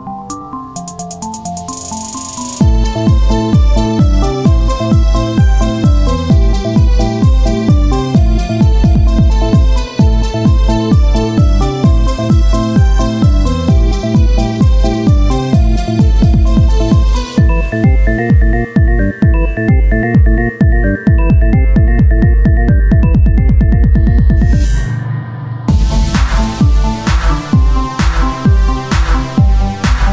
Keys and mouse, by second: 1.2 z, 3.4-5.1 drag, 6.5 Tab, 8.7-10.3 drag, 11.3 s, 12.9-14.2 drag, 14.2 ctrl+z, 15.5 s, 17.8 click, 18.3 Tab, 21.8 KP_1, 25.5 middle click, 25.8 z, 28.3 shift+a, 29.8 s.